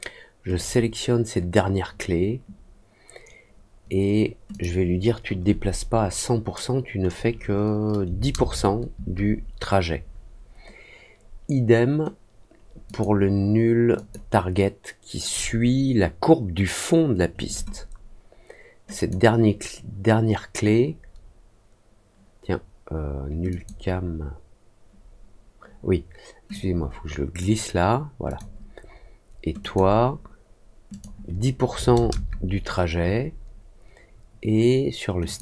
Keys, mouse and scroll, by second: 0.5 click, 4.4 click, 12.8 click, 13.9 click, 18.9 click, 23.4 click, 26.4 click, 28.2 click, 29.5 click, 30.8 click, 35.2 click.